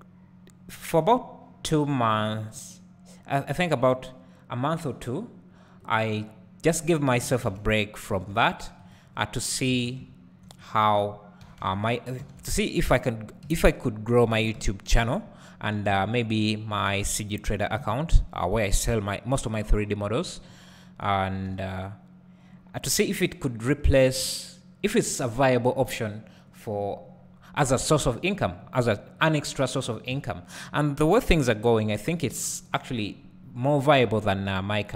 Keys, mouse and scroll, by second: 0.9 a, 1.7 s, 2.5 right click, 3.3-7.2 drag, 7.2 r, 8.9 right click, 9.1-9.7 scroll down 1, 9.7 alt+a, 10.6 click, 11.4 r, 12.9 click, 13.4 KP_Decimal, 14.5 KP_1, 15.9 s, 17.3 click, 17.8 KP_Decimal, 19.8-23.0 drag, 20.5-21.5 scroll down 2, 21.5 g, 23.7 s, 29.3 click, 30.1 s, 31.8 click, 34.2 Tab.